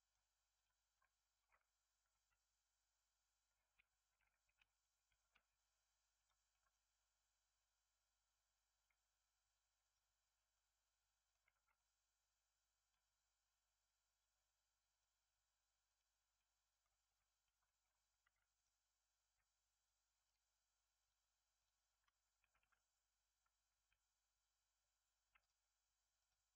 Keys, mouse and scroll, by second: 0.5 click, 0.9-2.0 middle drag, 2.0 r, 6.1 click, 6.4-8.7 middle drag, 8.7 click, 9.8 click, 10.5-11.5 middle drag, 11.5 alt+z, 11.7-14.7 middle drag, 14.8-16.3 drag, 16.3-17.0 middle drag, 17.0 Tab, 17.4 middle click, 17.7-18.2 scroll up 1, 18.2 ctrl+r, 20.9-22.5 drag, 22.5 g, 26.1-26.5 drag.